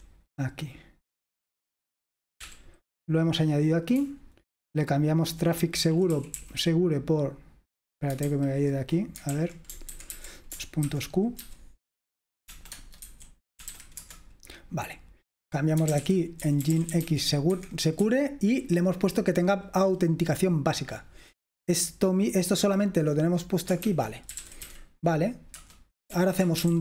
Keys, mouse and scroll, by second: 0.0 typing, 2.6 typing, 4.0-5.0 typing, 6.6 typing, 8.3 super+h, 9.5 super+l, 9.9 ctrl+w, 10.2 ctrl+w, 10.6 shift+Caps_Lock, 11.0-14.3 typing, 12.8 Caps_Lock, 15.7-18.1 typing, 20.8 typing, 23.7-26.8 typing, 25.7 Return.